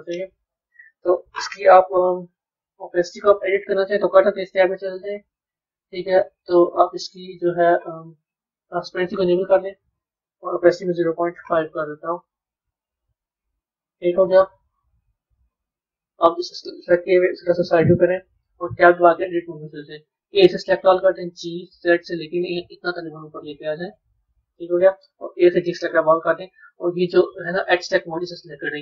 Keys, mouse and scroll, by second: 0.7 KP_1, 2.2-3.0 scroll down 4, 4.1 click, 6.4-9.0 scroll down 6, 9.0 click, 10.0-12.5 drag, 12.5-15.4 middle drag, 15.4 click, 17.3 KP_3, 18.1-19.1 scroll up 1, 19.1 b, 27.6 click.